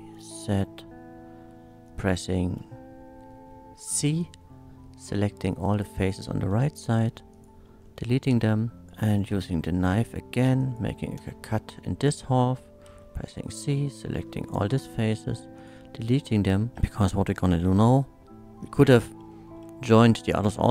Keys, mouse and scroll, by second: 0.2 click, 1.8 click, 1.9 3, 2.2 c, 4.2-6.0 drag, 6.0 right click, 6.5 x, 7.3 click, 7.3 x, 7.8 shift+middle click, 8.5-8.8 shift+scroll up 1, 8.8 click, 8.8 k, 9.5 x, 10.6 click, 11.2 space, 12.2 middle click, 12.8 c, 13.3-14.5 drag, 14.4 right click, 15.0 x, 15.6 click, 16.1 Tab, 16.5 shift+middle click, 16.7-17.2 shift+middle drag, 19.3 middle drag.